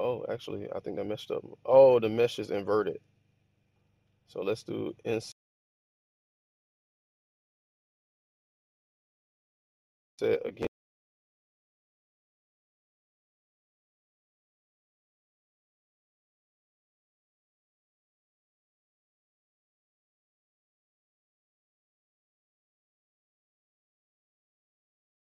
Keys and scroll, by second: 0.0 Escape, 2.7 super+z, 3.2 super+z, 10.5 i.